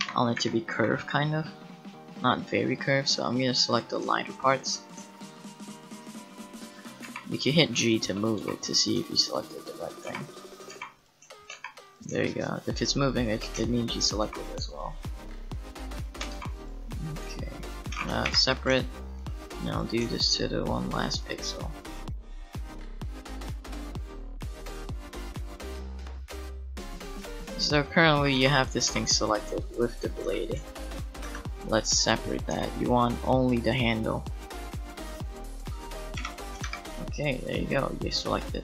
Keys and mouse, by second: 0.0 KP_7, 0.4 a, 0.7 a, 2.2 right click, 7.0 g, 7.9 middle click, 8.4 g, 8.5-10.0 middle drag, 10.0 shift+g, 10.7 g, 11.5 g, 16.3 g, 18.2 p, 22.5 middle click, 22.7 g, 24.4-26.6 typing, 25.8 Tab, 26.9 right click, 28.9 g, 30.2 Tab, 31.2 Tab, 32.5 c, 36.2 p, 36.6 Tab, 37.4 right click, 38.5 right click.